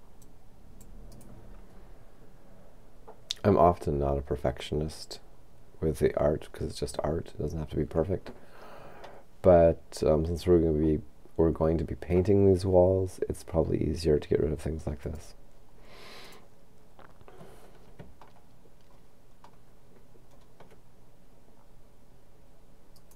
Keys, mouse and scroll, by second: 0.3 click, 1.1 right click, 15.0 click, 16.3 right click, 18.3-19.9 shift+middle drag, 23.0 right click.